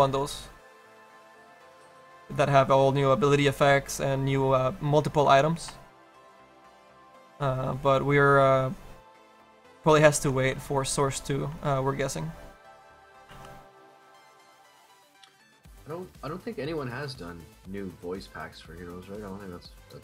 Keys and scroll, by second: 13.4 ctrl+z.